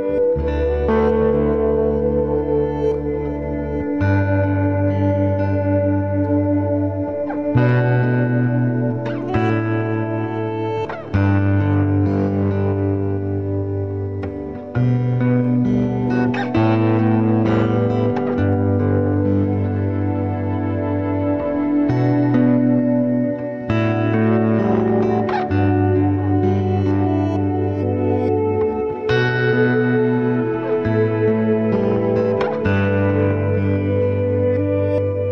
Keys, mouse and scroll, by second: 2.1-13.8 drag, 18.7 click, 23.4 click, 25.8-33.4 drag, 33.4-35.3 drag.